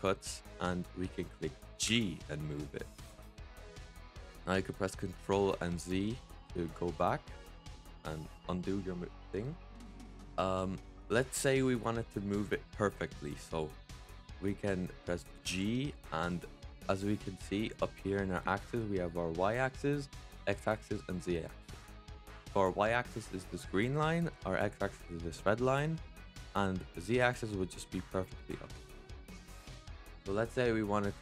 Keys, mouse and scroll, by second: 1.7 g, 5.9 ctrl+z, 10.7-13.8 middle drag, 14.3-15.3 middle drag, 15.3 g, 21.8-22.8 middle drag, 22.8-24.3 scroll down 1, 24.3-25.8 scroll down 1, 25.9-26.6 middle drag, 26.6-28.5 scroll down 1, 28.5-31.2 middle drag.